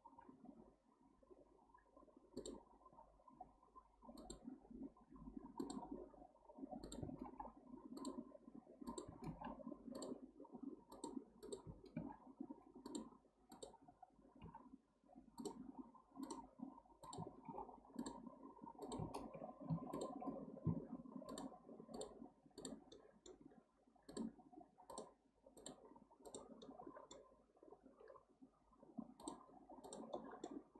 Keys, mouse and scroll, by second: 0.2 k, 9.3 k, 14.4 k, 19.6 k, 19.7 2, 19.9 click, 21.3 shift+click, 21.9 shift+click, 22.6 shift+drag, 22.9-24.1 shift+middle drag, 24.1 shift+click, 24.9 shift+click, 25.6 shift+drag, 26.3 shift+click, 26.6-29.2 shift+middle drag, 29.2 shift+click, 29.8 shift+click, 30.1-30.7 shift+middle drag.